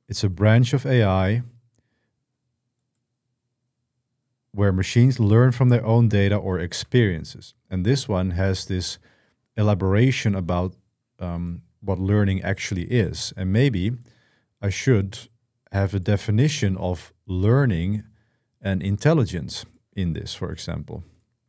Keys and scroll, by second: 0.2 Escape, 6.5 Escape.